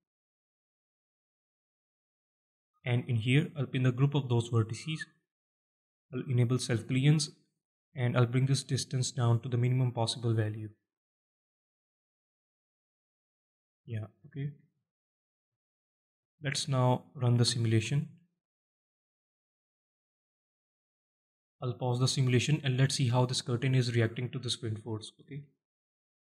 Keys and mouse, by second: 2.9-4.0 drag, 6.9-9.3 drag, 14.1-14.5 alt+shift+middle drag, 14.6-14.9 alt+middle drag, 15.3 alt+middle drag, 16.0-16.4 shift+middle drag, 16.6-17.1 alt+middle drag, 17.3-17.7 shift+middle drag, 17.8-18.6 alt+middle drag, 19.0 space, 21.3 shift+Left, 21.8-25.0 middle drag, 25.2 shift+middle drag, 25.8-26.1 alt+middle drag.